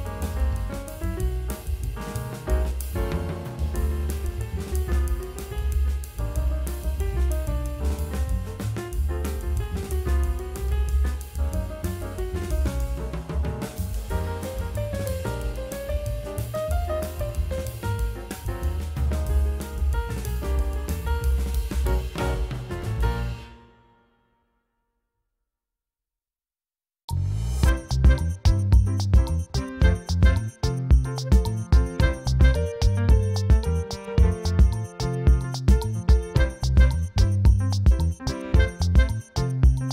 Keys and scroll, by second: 0.7 v, 0.9 ctrl+u, 2.2 alt+i, 5.0-7.0 typing, 9.6 F9, 12.7 ctrl+f, 12.9 ctrl+alt+z, 17.3 ctrl+j, 18.3 b, 20.7 v, 20.8 alt+shift+BackSpace, 22.3-25.1 typing, 24.4 ctrl+e, 26.7 ], 27.4 space, 27.9 space, 28.7 space, 31.2 ], 33.5 space, 34.8 space, 35.2 space, 35.3 v, 35.4 space, 36.9-37.7 typing.